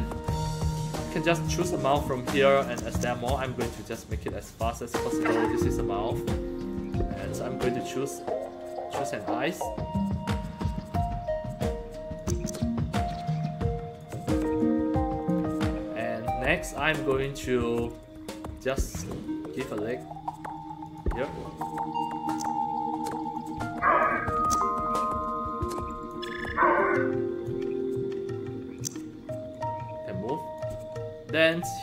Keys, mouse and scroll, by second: 0.3 alt+click, 1.4 click, 2.6-4.8 drag, 6.8 click, 12.1-13.9 drag, 14.5 alt+click, 18.5 click, 20.8 click, 22.2-23.3 drag, 23.5 alt+click, 24.3-26.0 alt+drag, 26.3-27.4 alt+drag, 27.6 middle click, 28.7 click, 29.4-30.5 drag, 30.8 alt+click.